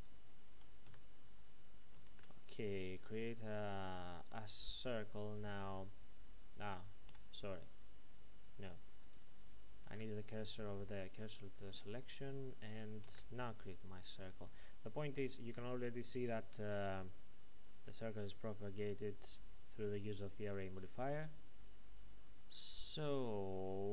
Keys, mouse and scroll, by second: 0.8 z, 2.1 shift+a, 4.4 click, 7.1 x, 7.7 click, 9.0 right click, 9.8 shift+s, 11.1 click, 13.0 shift+a, 13.7 click, 18.3 click.